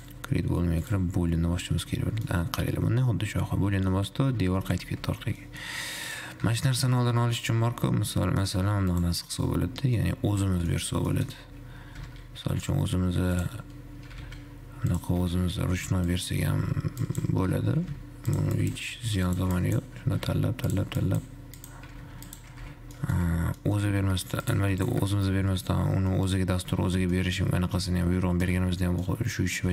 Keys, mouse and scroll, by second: 0.1 click, 1.1-2.1 drag, 2.1-2.6 scroll down 3, 2.6-5.0 middle drag, 5.0 ctrl+z, 5.6-6.1 middle drag, 6.1 scroll up 2, 6.3 click, 7.1 middle click, 7.6-8.0 scroll up 2, 8.0-9.0 middle drag, 9.0 scroll up 1, 9.1 click, 9.6 click, 10.2-11.0 middle drag, 12.3 shift+a, 14.5 g, 15.6 Tab, 16.1 alt+z, 16.6 click, 16.7 alt+z, 17.3 click, 17.7 g, 20.1 click, 20.3 g, 21.2 click, 22.1 g, 23.1 Tab, 23.2 middle click, 23.6 alt+z, 24.1 g, 25.1 shift+click, 26.0 ctrl+KP_Subtract, 26.6 middle click, 27.1 alt+z, 27.2 alt+z, 27.5-28.0 middle drag, 28.0 Tab, 28.6 Tab, 28.8 shift+z, 29.3-29.7 middle drag.